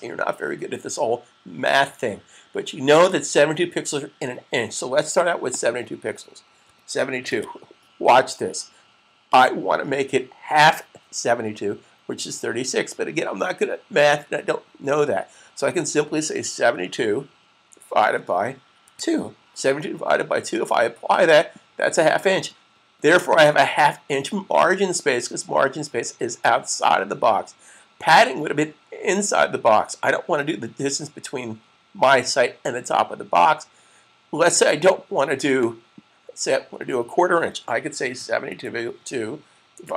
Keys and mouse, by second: 5.3 click, 6.7-7.7 typing, 9.2-9.9 typing, 17.9 /, 19.7-20.4 typing, 21.5 click, 23.5-24.2 typing, 34.4 click, 37.8 7.